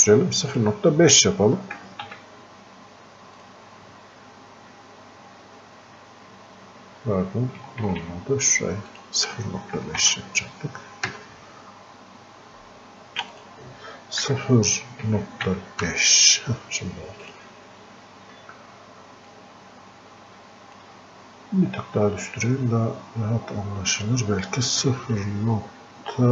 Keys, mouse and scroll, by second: 3.4 click, 7.6 click, 7.9 ctrl+z, 9.0 click, 13.4 click, 17.3-23.1 drag, 24.0 click.